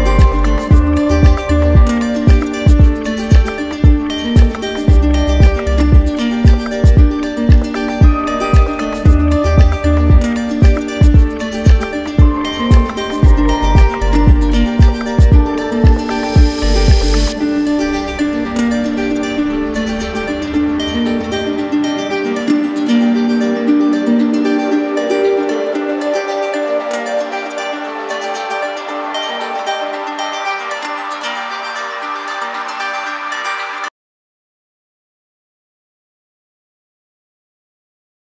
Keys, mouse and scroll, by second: 0.6 click, 1.3 click, 3.6 click, 4.1 shift+click, 4.6 shift+click, 5.4 click, 6.9 click, 8.6 alt+click, 9.3 click, 10.2 click, 10.6 shift+click, 11.3 shift+click, 12.6 click, 13.5 alt+click, 14.2 click, 15.2 alt+click, 16.0 click, 16.6 shift+click, 20.2 click, 20.9 click, 21.3 click, 22.1 click, 23.3 alt+click, 23.5 alt+click, 25.3 alt+click, 27.3 click, 28.1 alt+click, 29.2 click.